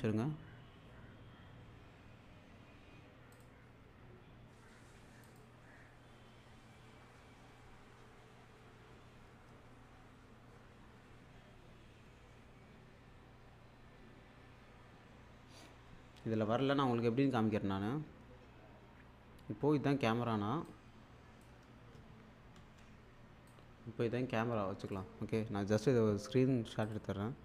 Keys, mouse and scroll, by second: 3.3 click, 5.3 click, 18.0 shift+Num_Lock, 20.6-21.6 shift+super+click, 22.5 shift+super+s, 25.6 click, 26.8 click.